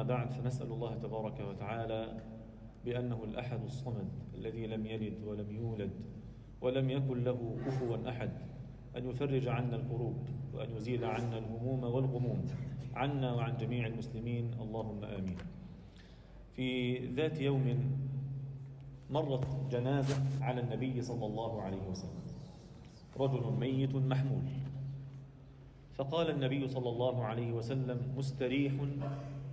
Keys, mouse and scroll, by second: 2.8 click, 3.1-3.6 scroll up 2, 3.7 alt+shift+middle drag, 5.8 shift+a, 8.3 click, 8.3 shift+a, 8.9-10.0 drag, 10.4 click, 11.2 click, 12.1 click, 12.9-14.3 drag, 15.7-17.5 drag, 19.0 KP_Decimal, 19.7-20.5 alt+middle drag, 20.7 Tab, 21.0 alt+middle click, 23.2 e, 26.4 g.